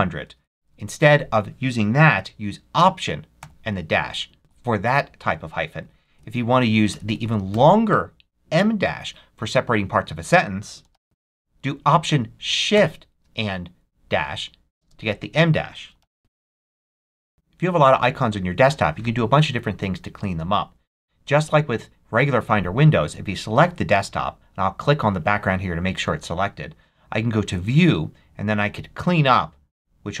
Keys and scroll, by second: 0.0-0.1 typing, 3.3 alt+-, 4.4 0, 5.5 BackSpace, 10.5-11.4 typing, 12.6 alt+shift+-, 14.6-16.7 typing.